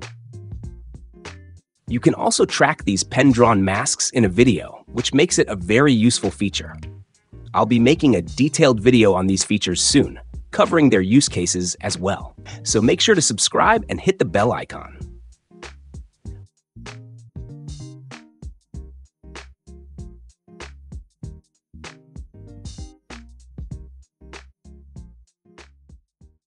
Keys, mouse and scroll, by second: 5.2-6.2 drag, 10.0 click, 15.3 click, 17.2 click.